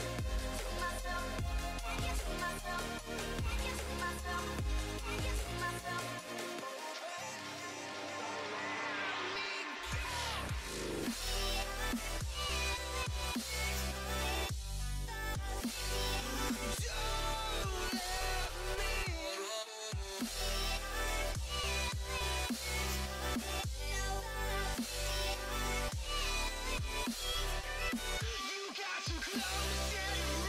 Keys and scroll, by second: 0.2 alt+Down, 0.6 Right, 1.3 alt+BackSpace, 1.9 alt+Down, 2.3 Right, 2.8 alt+BackSpace, 3.3 alt+Down, 3.7 Right, 4.2 alt+BackSpace, 4.8 alt+Down, 5.2 alt+Right, 6.1 alt+BackSpace, 6.7 alt+Down, 7.1 Right, 7.6 alt+Delete, 8.1 alt+Down, 8.5 Right, 9.0 alt+Delete, 9.5 alt+Down, 9.9 Right, 10.4 alt+BackSpace, 10.9 alt+Down, 11.3 Right, 11.8 alt+BackSpace, 12.7 alt+Down, 13.0 Right, 13.6 alt+BackSpace, 14.1 alt+Down, 14.5 Right, 15.0 alt+BackSpace, 15.9 alt+Down, 16.2 Right, 16.8 alt+BackSpace, 17.2 alt+Down, 17.7 Right, 18.2 alt+BackSpace, 18.6 alt+Down, 19.0 Right, 19.5 alt+BackSpace, 20.0 alt+Down, 20.4 Right, 20.9 alt+BackSpace, 21.4 alt+Down, 21.8 Right, 22.3 alt+BackSpace, 23.4 alt+Down, 23.8 Right, 24.3 alt+BackSpace, 24.7 alt+Down, 25.1 Right, 25.6 alt+BackSpace, 26.1 alt+Down, 26.5 Right, 27.0 alt+BackSpace, 27.6 alt+Down, 28.0 Right, 28.4 alt+BackSpace, 29.0 alt+Down, 29.3 Right, 29.8 alt+BackSpace.